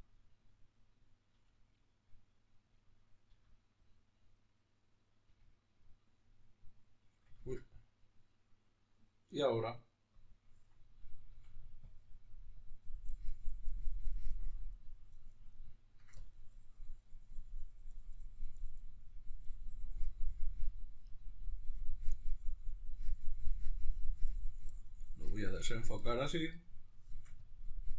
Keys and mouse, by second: 1.0 f, 2.5-11.4 drag, 3.0 f, 5.0 f, 7.1 ctrl+z, 11.0 f, 11.6-15.4 drag, 15.4 ctrl+middle click, 15.9-26.7 drag, 26.7 shift+middle click, 27.1-27.9 drag.